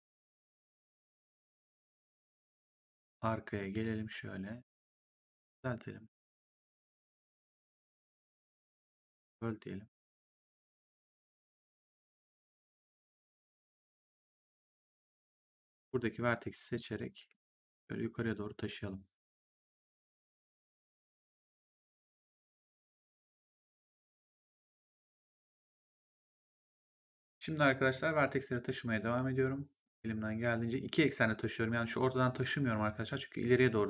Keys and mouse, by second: 1.1 click, 3.5 r, 5.3 click, 6.6 click, 11.2 click, 16.5 click, 17.1 w, 17.8 click, 20.1 click, 21.5 click, 24.0 click, 25.3 click, 26.4 click, 27.0 right click, 27.2 click, 27.6 click, 28.9 click, 31.6 click.